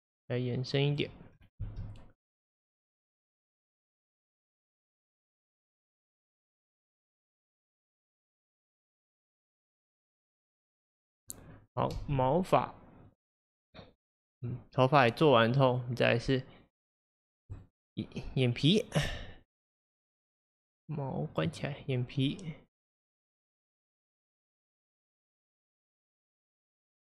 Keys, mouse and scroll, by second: 1.4-1.7 scroll down 1, 1.7 space, 12.0 space, 13.1-15.8 drag, 17.6 click, 20.2 click, 21.4 click, 22.9 click, 23.2 click, 23.8 click.